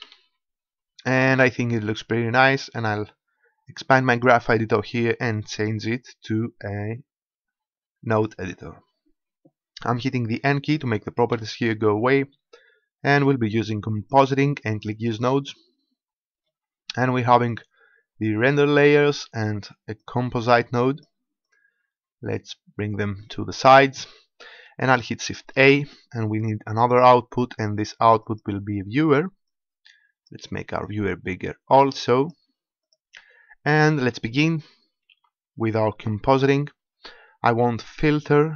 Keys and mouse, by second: 0.0 Escape, 2.4-4.1 drag, 11.3 n, 14.0-17.0 drag, 17.4-19.0 drag, 20.0-25.4 right drag, 25.4 shift+a, 29.4-32.8 right drag, 32.8-34.5 drag, 35.1 shift+a.